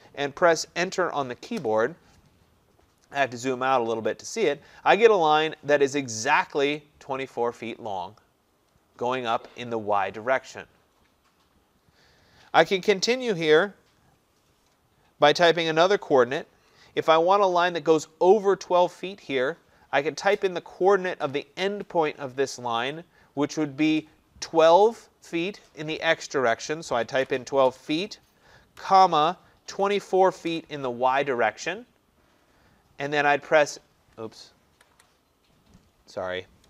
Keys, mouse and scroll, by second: 1.6 Return, 3.0 middle click, 3.0 middle click, 3.9 middle click, 4.1 middle click, 27.1-30.5 typing, 34.8 Left, 35.0 Left.